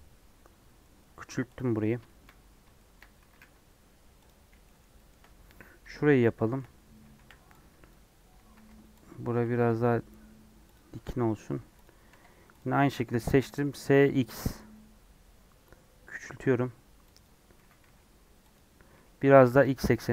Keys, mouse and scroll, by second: 1.6-2.6 scroll up 9, 2.0 shift+middle click, 2.7 shift+middle click, 3.2 s, 4.3 scroll down 1, 4.6-7.1 shift+middle drag, 7.1 1, 7.8 click, 8.5 alt+z, 9.2 click, 9.5 g, 10.9 Tab, 11.3 Tab, 11.5 3, 12.0 alt+z, 12.5 click, 13.3 s, 17.5 s, 18.9 g.